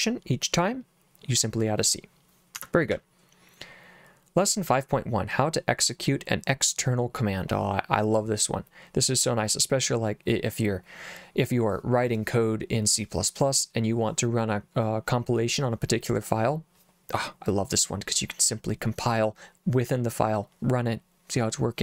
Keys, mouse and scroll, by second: 2.5 Escape, 2.9 j, 4.7 j.